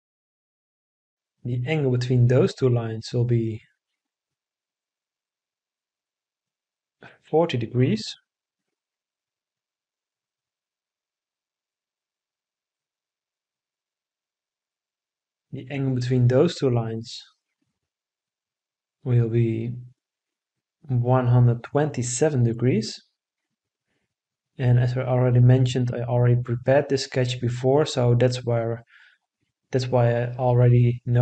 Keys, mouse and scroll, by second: 4.0-6.5 right drag, 8.5 4, 9.1 0, 9.6 Return, 17.9-20.3 right drag, 22.6 1, 23.1 2, 23.7 7, 24.7 Return.